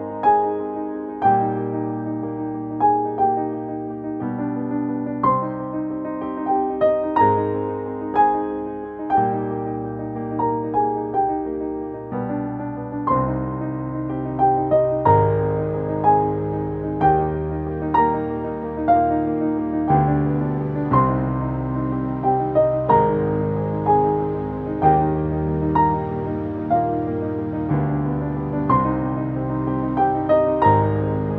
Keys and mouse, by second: 0.1 shift+Up, 1.6 click, 5.0-6.8 drag, 8.8-10.7 drag, 12.6 click, 17.5 click, 20.3 click, 23.1 click.